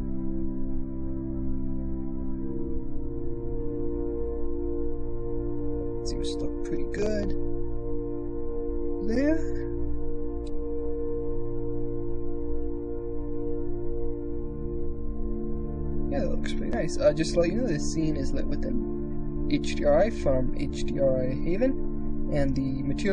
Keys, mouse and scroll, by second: 3.0-5.1 middle drag, 5.2-6.2 drag, 11.0 shift+space, 11.3 click, 12.0 KP_0, 12.4 z, 14.1 shift+click.